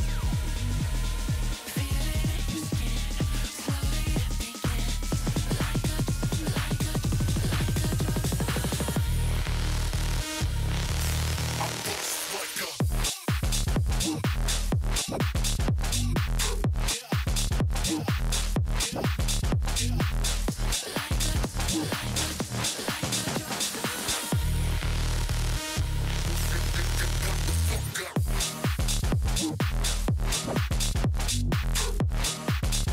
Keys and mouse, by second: 3.0 click, 3.3 click, 3.6 click, 4.1 click, 5.1 click, 7.0 click, 8.0 click, 8.5 click, 9.3 click, 12.8 click, 18.7 space, 18.7 click, 19.2 click, 21.7 click, 22.1 click, 23.9 space, 24.0 click, 24.9 space, 25.3 click, 26.7 click, 27.7 Return, 28.4 ctrl+shift+[, 28.7 ctrl+], 31.6 click.